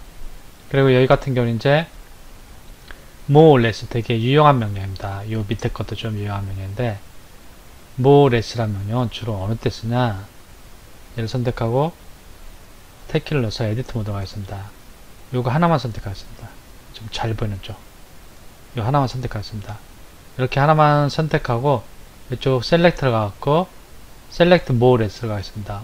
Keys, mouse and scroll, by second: 11.1 Left, 12.9 Tab, 13.9-14.6 scroll up 1, 14.6 click, 15.9 click, 17.2 click, 18.1 click, 19.3 middle click, 22.2 click.